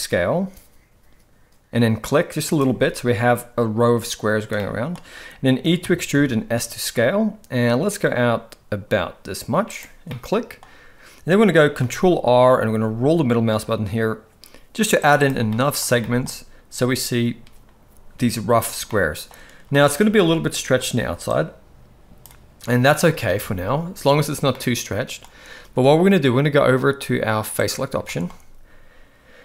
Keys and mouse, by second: 4.6 middle click, 5.9 e, 10.1-10.6 middle drag, 11.8 ctrl+r, 15.5 middle click, 16.1 shift+middle drag, 18.9-19.3 middle drag, 19.7 middle drag, 20.2 shift+middle drag, 21.3-22.3 drag, 23.3 alt+a, 24.6-25.2 middle drag, 27.6 click, 28.1 shift+middle drag.